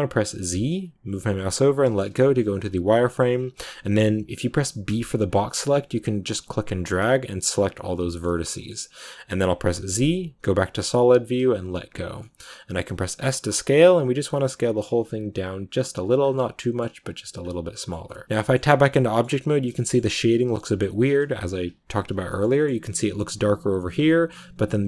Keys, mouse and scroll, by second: 1.9 z, 8.0-11.3 shift+middle drag, 11.3 z, 12.1 middle click, 13.0 s, 16.1 scroll down 1, 16.3 middle click, 16.9 s, 17.4-18.5 middle drag, 18.5 Tab, 18.7 scroll down 2, 18.8 middle click, 19.2 scroll up 2, 19.4 middle click, 19.9 scroll up 1, 20.1-24.7 middle drag, 24.7-24.8 scroll up 1.